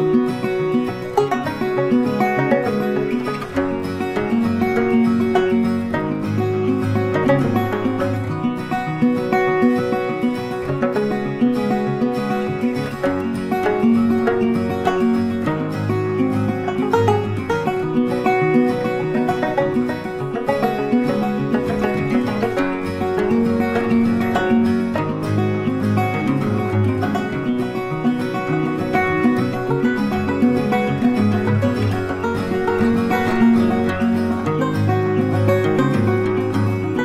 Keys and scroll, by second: 18.7 ctrl+t.